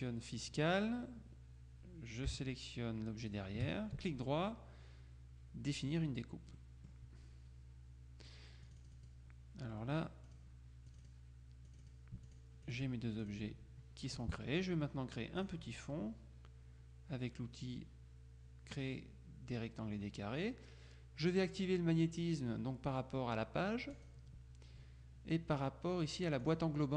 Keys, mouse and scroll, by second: 3.3 shift+click, 4.1 shift+right click, 5.8 click, 6.7 click, 8.7 click, 10.0-11.7 drag, 15.5 click, 24.1 click, 26.5 click.